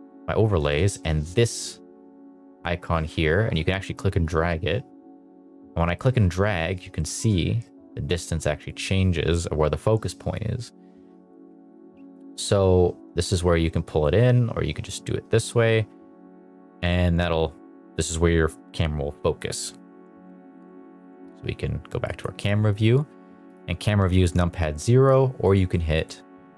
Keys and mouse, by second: 0.4 middle drag, 0.8 shift+middle drag, 3.1 click, 8.7 click, 14.7-17.0 drag, 19.4 KP_0, 22.0 click, 23.4 KP_0, 24.1 KP_0, 25.4 click.